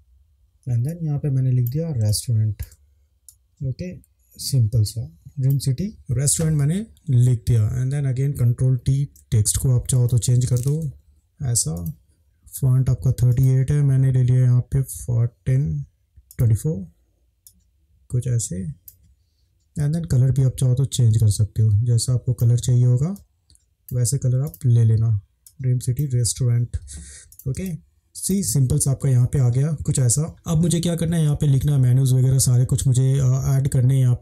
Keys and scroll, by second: 0.3 ctrl+v, 2.1 space, 8.9 ctrl+t, 10.7 Up, 11.0 Up, 11.1 Down, 27.6 space.